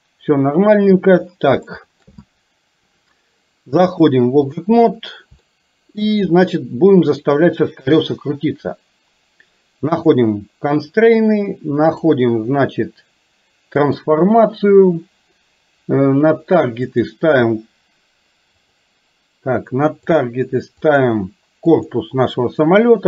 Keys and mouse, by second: 1.7 shift+middle click, 4.0 click, 5.5 shift+middle click, 10.0 click, 12.1-14.2 drag, 17.0 click, 18.8-20.2 drag, 20.8 click.